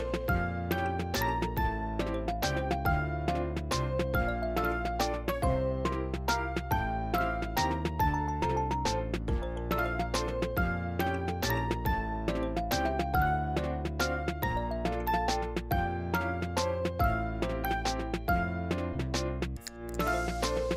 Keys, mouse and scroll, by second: 0.0-0.9 scroll up 9, 0.0 shift+middle click, 0.9 click, 0.9 shift+f, 1.2 scroll down 16, 1.4 middle click, 1.6 click, 1.9 click, 1.9 shift+f, 2.1 shift+middle click, 2.2 scroll up 2, 2.2 middle click, 2.3 shift+f, 2.7 click, 3.0 middle click, 3.1 click, 3.4 middle click, 3.5 click, 3.8 ctrl+z, 3.8 click, 4.3 middle click, 4.4 click, 4.6 ctrl+z, 4.7 click, 4.8 middle click, 5.0 click, 5.3 scroll down 3, 5.4 middle click, 5.5 scroll up 4, 5.5 middle click, 5.6 click, 5.8 ctrl+z, 5.9 middle click, 6.2 click, 6.2 m, 6.4 click, 6.9 scroll down 1, 7.0 shift+middle click, 7.1 scroll up 2, 7.1 middle click, 7.2 click, 7.3 scroll down 1, 7.4 middle click, 7.5 click, 7.6 ctrl+z, 7.8 click, 8.1 scroll down 1, 8.1 middle click, 8.3 m, 8.4 middle click, 8.5 m, 8.6 shift+middle click, 8.9 click, 9.0 shift+f, 9.1 scroll up 3, 9.1 shift+middle click, 9.5 click, 9.8 scroll down 3, 9.8 m, 9.9 scroll up 2, 10.0 ctrl+z, 10.1 ctrl+z, 10.5 scroll up 1, 10.6-11.1 scroll down 6, 10.9 click, 11.1-13.0 typing, 11.2 middle click, 11.4-11.9 scroll up 4, 11.4 middle click, 11.9 click, 12.0 scroll down 2, 12.1 middle click, 12.3 middle click, 12.4 scroll up 2, 12.4 middle click, 12.6 middle click, 12.8 click, 12.9 scroll down 1, 13.0 middle click, 13.5-14.0 scroll up 2, 13.5 middle click, 14.0 click, 14.0 scroll down 2, 14.1 m, 14.1 middle click, 14.2-14.7 scroll up 6, 14.4 middle click, 14.5 middle click, 14.7 scroll down 1, 14.9 click, 15.0 m, 15.1 middle click, 15.2-15.7 scroll down 4, 15.8-16.2 scroll up 10, 16.2 click, 16.5 scroll down 2, 16.6-16.9 scroll up 3, 16.6 middle click, 16.9-17.2 scroll down 2, 17.1 click, 17.2 m, 17.3 middle click, 17.4-17.8 scroll up 2, 17.8 click, 17.9 scroll down 1, 18.0 middle click, 18.6 click, 18.7 m, 18.8 middle click, 19.1-19.7 scroll up 2, 19.2 middle click, 19.4 middle click, 19.7 click, 19.8 scroll down 8, 19.9 middle click, 20.4 click, 20.5 scroll up 4, 20.5 middle click, 20.6 middle click.